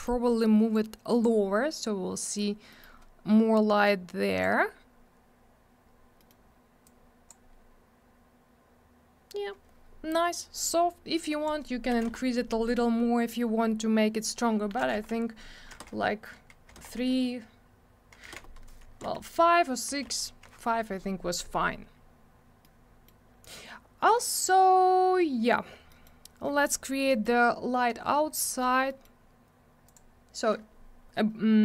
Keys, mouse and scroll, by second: 0.1 middle click, 0.8 click, 2.8 middle click, 3.9 click, 6.2 middle click, 6.3 middle click, 6.9 click, 11.3 click, 11.5 click, 11.9 7, 12.1 Return, 14.8 2, 14.9 Return, 15.7 3, 15.8 Return, 16.7 4, 16.8 Return, 18.3 5, 18.3 Return, 18.9 6, 19.0 Return, 19.9 5, 20.1 Return, 22.1 scroll down 1, 22.6 middle click, 25.9 middle click, 26.1 middle click, 26.5 scroll up 1, 27.1 middle click, 27.2 middle click, 28.0-28.5 scroll down 1, 28.5 middle click, 28.6 middle click, 28.9 middle click, 29.0 double middle click, 29.9 click, 30.0 click.